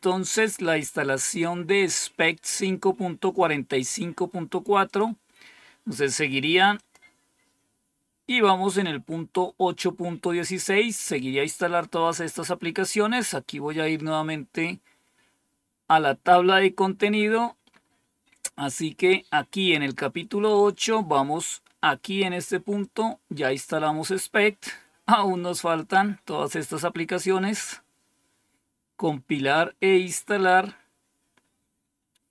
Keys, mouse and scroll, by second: 4.7 click, 6.6 click, 13.2 click, 16.3-17.1 scroll down 2, 17.1-17.7 scroll up 2, 20.5-22.7 scroll down 2, 22.7-24.1 drag, 24.6 scroll down 2, 25.6 scroll down 2, 27.3 scroll down 1, 28.0-28.7 scroll down 1, 28.7-29.8 scroll down 1, 29.8-30.8 scroll down 1, 30.8-32.3 scroll down 1.